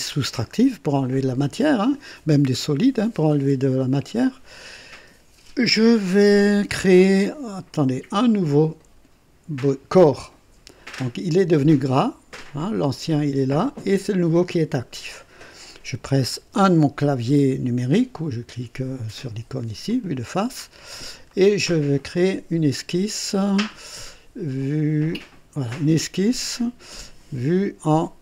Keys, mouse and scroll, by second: 9.9 click, 16.4 KP_1, 19.8 click, 20.5 scroll up 1, 21.3-22.0 right drag, 25.7 click.